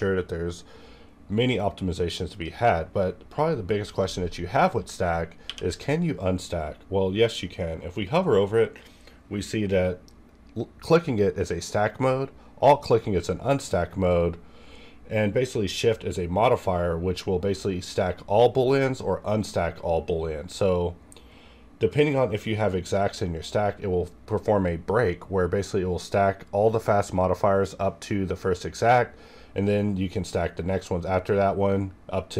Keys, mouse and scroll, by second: 2.3-5.5 drag, 5.4 q, 8.8 q.